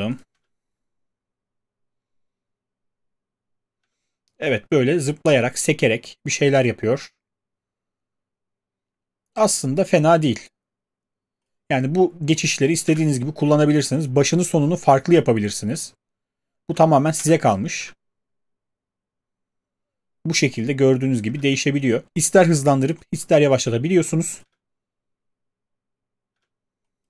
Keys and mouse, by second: 0.3 space, 3.8 space, 12.9 space, 17.2 space, 17.8 space, 21.3 space, 24.4 space, 26.3 space.